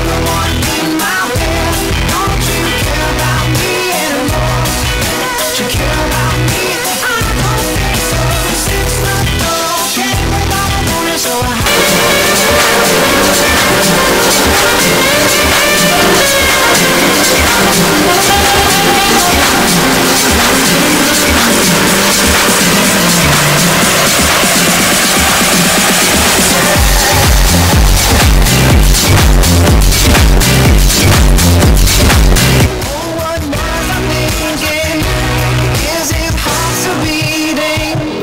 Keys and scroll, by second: 33.2 Page_Down.